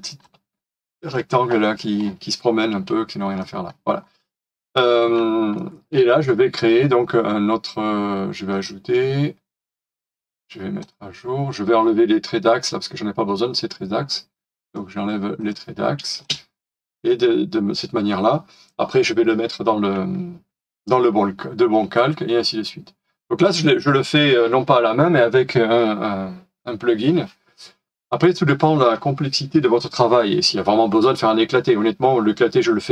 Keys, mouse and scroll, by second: 0.2 Delete, 0.6-1.1 scroll down 1, 1.1 shift+middle click, 2.0 scroll down 1, 3.4 middle click, 5.5 shift+middle click, 6.6 right click, 10.0 right click, 16.1 space, 21.7-22.0 scroll up 1.